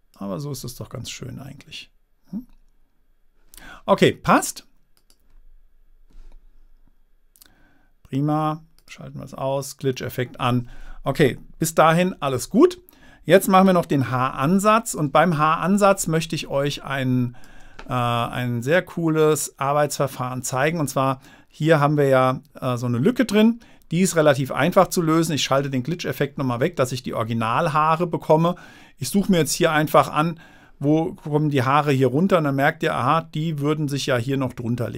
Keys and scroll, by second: 12.6 super+-, 14.4 super++, 15.4 super++, 16.8 space, 28.0 space.